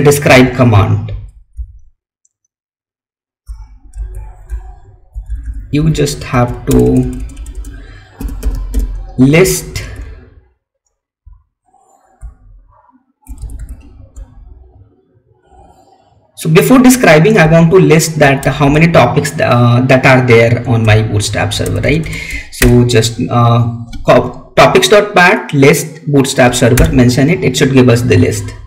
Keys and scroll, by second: 0.2 Up, 1.6 Left, 3.9 Right, 4.6 Left, 6.2 Right, 9.7 Right, 12.1 Right.